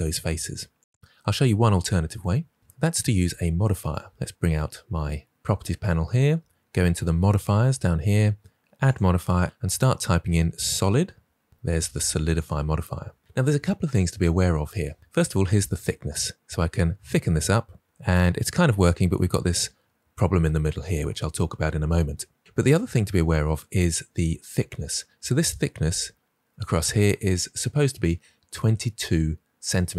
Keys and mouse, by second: 0.3 Delete, 3.8 click, 8.8-12.4 drag, 15.4-18.8 drag.